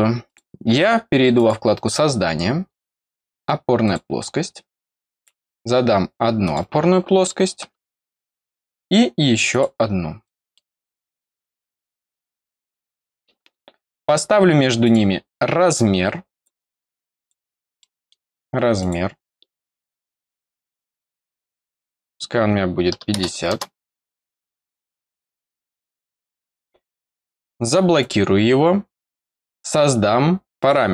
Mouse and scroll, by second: 0.2 click, 1.3 click, 3.8 click, 5.1 click, 6.4 click, 8.7 scroll up 1, 9.4 click, 10.2 middle click, 10.6-11.3 scroll down 1, 11.3-12.7 scroll down 1, 12.7 click, 14.8 click, 15.5 scroll up 1, 16.3 click, 17.1 click, 17.7 middle click, 18.7 click, 20.0 click, 20.9 click, 21.9 click, 24.4 click, 25.4 click, 26.5 click, 27.1 click, 27.9 click, 30.5 click.